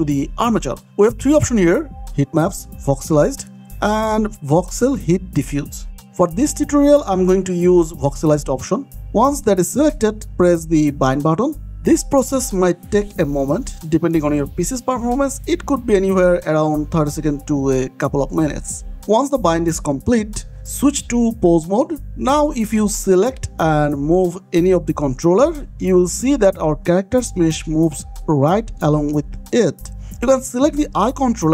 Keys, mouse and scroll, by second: 1.0 click, 11.7 click, 15.1 scroll up 1, 15.4-16.2 scroll down 1, 16.2 middle click, 16.9 click, 20.4 click, 22.1 ctrl+Tab, 23.1 click, 24.0 r, 25.5 Escape, 25.7 click, 27.1 r, 28.5 Escape, 29.1 scroll up 1, 29.5 shift+middle click, 29.9-30.3 scroll up 2, 30.4 middle click, 31.1 click.